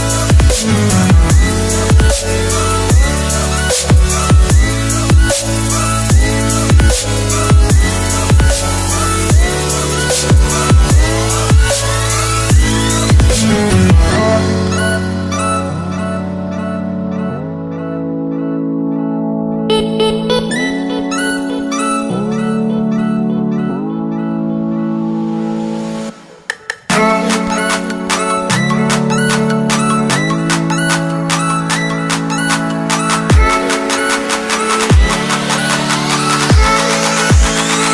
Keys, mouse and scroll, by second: 2.3 s, 3.8 click, 9.8 ctrl+z, 10.9 click, 12.7 ctrl+s, 13.8 click, 21.7 right click, 22.8 click, 26.9-28.1 alt+scroll up 3, 28.1-28.4 scroll down 1, 28.4 click, 28.7-29.4 scroll down 1, 29.4 click, 30.0 click, 31.5 right click, 31.9 click, 34.2 Left, 34.9 ctrl+t, 35.2 click, 36.3 Return, 36.6 click, 36.7 Delete, 36.9 right click.